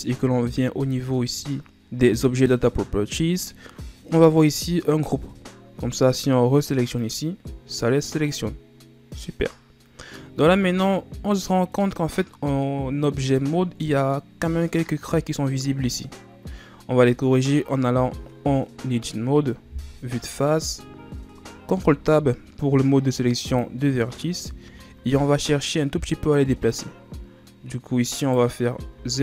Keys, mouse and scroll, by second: 1.4 scroll down 3, 1.6 click, 4.5-7.2 scroll down 1, 7.2 click, 10.6 Tab, 10.9 scroll down 1, 11.1-12.1 middle drag, 12.1-12.8 scroll down 3, 12.8-13.8 middle drag, 13.8 scroll down 1, 14.1 middle click, 14.5-17.2 scroll up 1, 17.2 Tab, 19.8 KP_1, 21.9 ctrl+Tab, 24.3-25.4 ctrl+scroll down 6, 25.4-28.4 scroll up 1, 28.4 right click, 29.1 z.